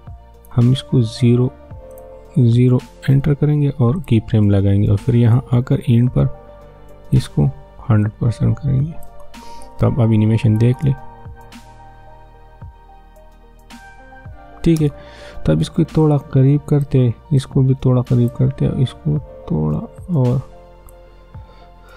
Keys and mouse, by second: 2.8 0, 3.1 Return, 4.0-10.7 drag, 10.7 space, 14.7 space, 16.0-21.9 drag.